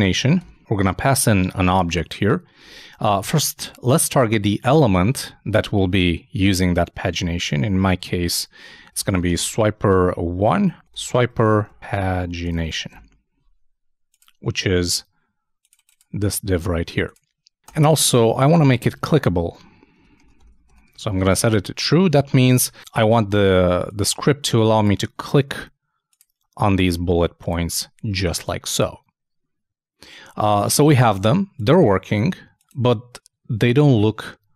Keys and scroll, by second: 2.8-4.6 typing, 7.4 shift+3, 20.3-21.1 typing, 22.5 super+s.